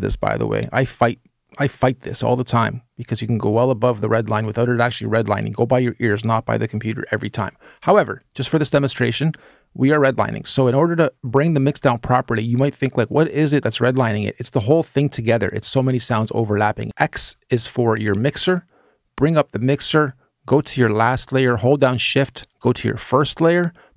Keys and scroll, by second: 16.8 x.